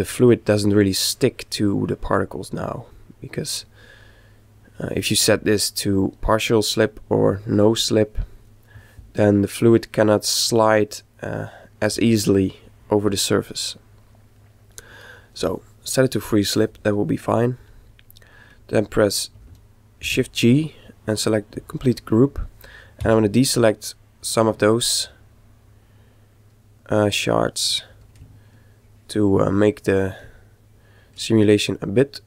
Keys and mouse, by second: 5.4 click, 7.2 click, 11.3-13.1 middle drag, 13.7-15.6 middle drag, 17.6-19.4 middle drag, 20.0 shift+g, 23.0 c, 27.2-28.3 middle drag.